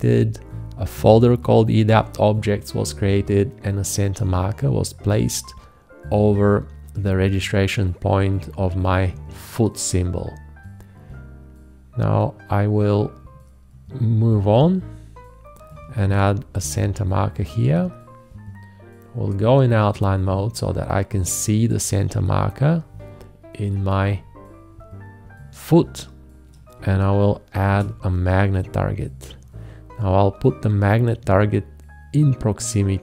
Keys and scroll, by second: 16.0 alt+`, 27.6 shift+`.